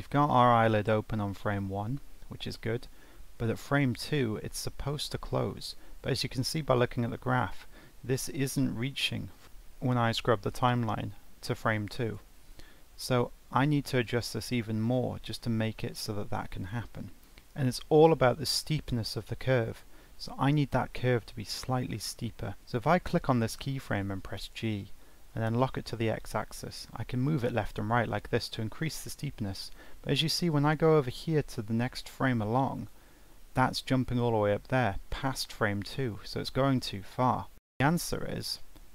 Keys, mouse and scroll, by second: 2.8-4.1 alt+scroll down 1, 9.4-10.5 alt+scroll up 1, 10.5 alt+scroll down 1.